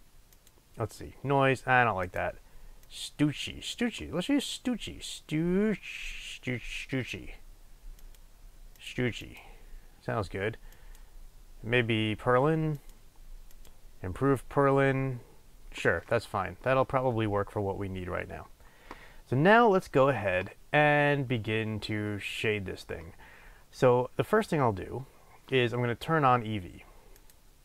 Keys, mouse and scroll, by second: 1.8-27.3 drag.